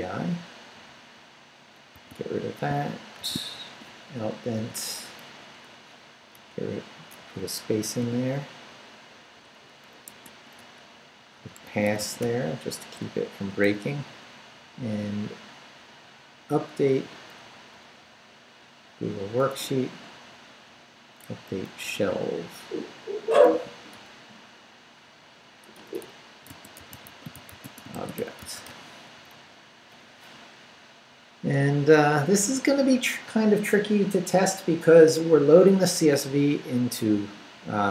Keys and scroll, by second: 1.9 d, 2.7 shift+d, 3.2 shift+v, 3.5 shift+Down, 4.5 shift+,, 5.3 shift+Down, 5.8 Down, 6.3 Return, 7.2 Up, 8.0 o, 10.1 Tab, 11.3-12.1 typing, 12.2 Return, 13.0 Up, 14.1 Right, 17.4 Down, 18.0 Right, 19.5 Right, 21.2 Left, 22.1 Right, 23.5 a, 23.9 BackSpace, 25.7-28.7 typing, 29.3 Down.